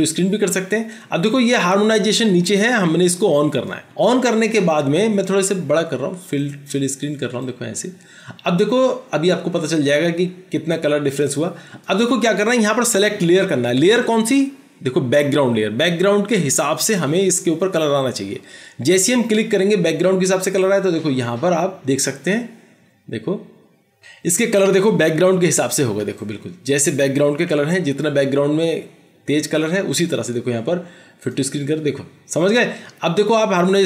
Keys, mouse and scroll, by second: 25.5 ctrl+-, 27.6 ctrl+-.